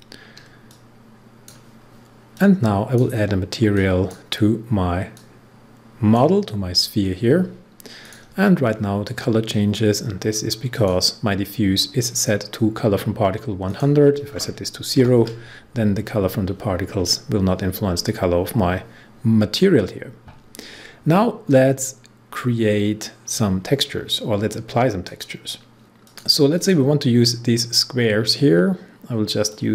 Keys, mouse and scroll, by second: 0.6-7.9 drag, 8.6 scroll down 1, 10.7 click, 13.6 click, 14.9 0, 25.0 click, 26.0 click, 29.4-29.7 drag.